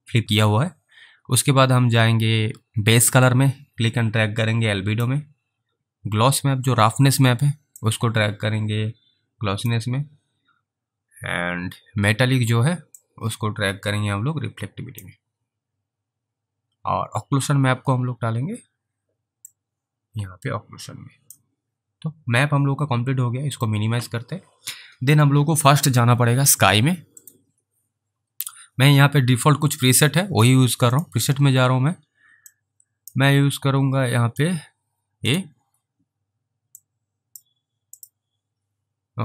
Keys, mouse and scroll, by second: 3.5 click, 8.1 click, 13.3 click, 19.4 click, 19.8 click, 23.6 click, 27.1 click, 30.9 click, 32.8 click, 33.5 scroll down 3, 35.3 click, 37.1 click, 38.0 click.